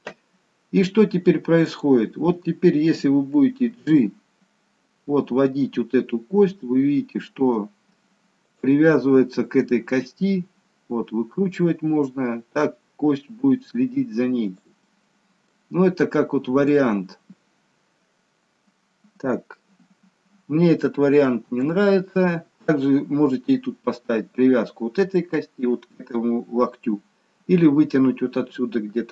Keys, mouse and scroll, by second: 0.7-1.1 scroll down 1, 1.7 click, 3.7 g, 8.9 middle click, 10.2 g, 15.0 middle click, 16.1-16.5 scroll up 1, 16.5 middle click, 21.5 Delete.